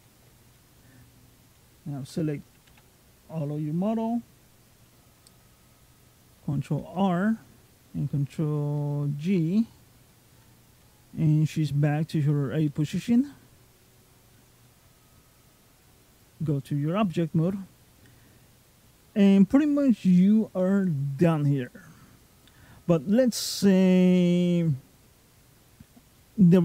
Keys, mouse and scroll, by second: 0.4 middle click, 2.5 a, 6.7 alt+r, 7.9 alt+f, 8.6 alt+g, 9.5-9.9 scroll down 2, 9.9 middle click, 11.1 scroll down 1, 11.4-11.7 scroll up 2, 12.1 middle click, 12.1 scroll up 2, 14.8 click, 16.5-16.9 scroll down 2, 16.9 middle click, 20.0-20.4 scroll up 3, 20.4 middle click, 21.7 scroll down 2, 22.0-23.3 scroll up 3, 23.5 middle click, 26.0 middle click.